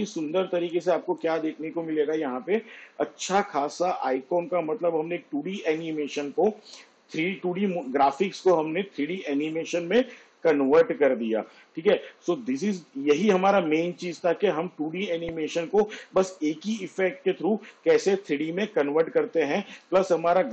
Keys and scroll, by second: 2.4 space.